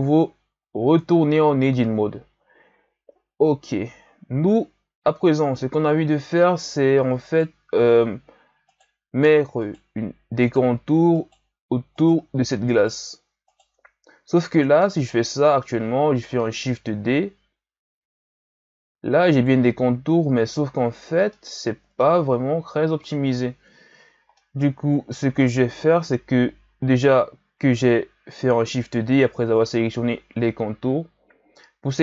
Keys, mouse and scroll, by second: 0.9 Tab, 4.1-7.2 ctrl+scroll up 2, 7.2 right click, 8.7 shift+right click, 9.7 shift+right click, 10.4 shift+right click, 11.2 shift+right click, 11.9 shift+right click, 12.7 shift+right click, 13.4 shift+right click, 16.6 shift+d, 21.3 middle click, 22.2-24.3 scroll up 1, 24.3-25.9 middle drag, 25.9 KP_1, 28.7 g.